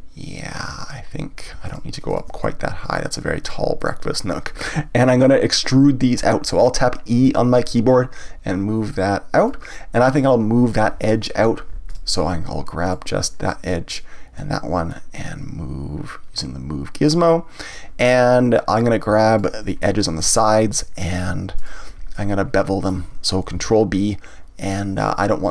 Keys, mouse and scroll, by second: 1.7 shift+click, 2.1 shift+click, 2.4-3.4 middle drag, 3.4 shift+click, 3.8 shift+click, 9.5 click, 11.9 click, 12.8 click, 13.9 shift+click, 14.9-17.9 drag, 18.7 click, 19.3 shift+click, 19.8-21.0 middle drag, 21.0 shift+click, 21.6 shift+click, 22.1-23.6 middle drag, 23.6 ctrl+b.